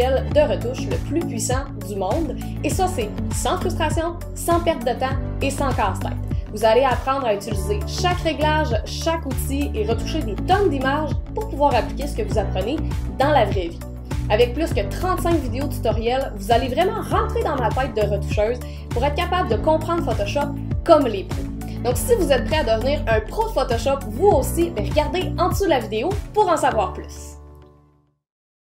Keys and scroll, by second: 0.0-2.7 typing.